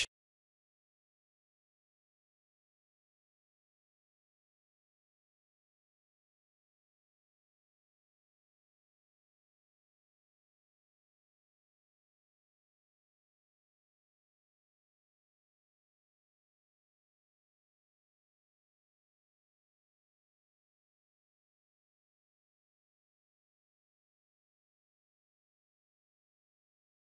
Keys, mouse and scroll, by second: 2.9-3.7 scroll down 2, 3.7-4.2 scroll down 2, 3.7 g, 8.2-8.5 scroll up 1, 8.8 scroll up 4, 9.1 shift+middle click, 10.6 e, 13.4 e, 18.8 e, 23.4 click, 26.0 click.